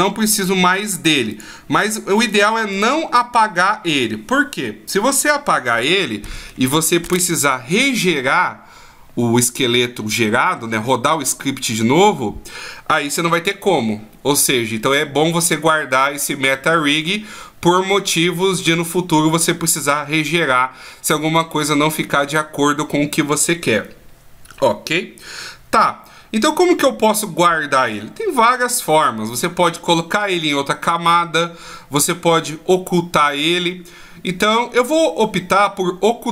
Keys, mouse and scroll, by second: 0.3 right click, 0.9 right click, 1.3 click, 1.8 right click, 2.3 right click, 2.7 right click.